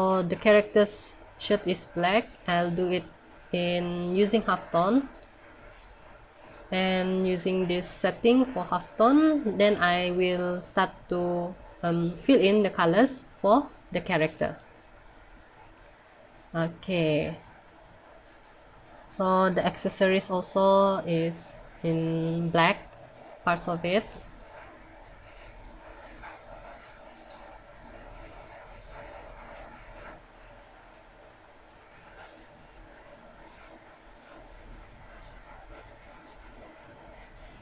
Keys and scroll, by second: 18.7 scroll down 1, 20.3 scroll up 1, 21.8 scroll down 1, 23.6 b, 29.6 scroll up 1, 30.6 scroll down 1.